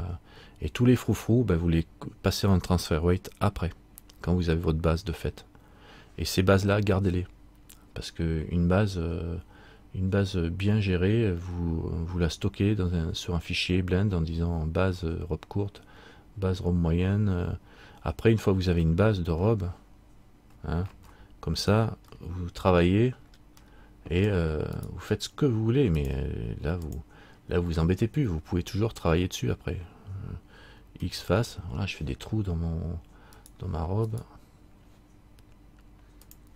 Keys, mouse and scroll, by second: 19.1 middle click, 21.1 alt+r, 22.3 shift+middle click, 23.1-23.4 scroll up 1, 23.7 scroll up 4, 23.9 middle click, 25.0 right click, 26.2 click, 33.5 right click, 33.5 x, 36.4 right click, 36.4 click.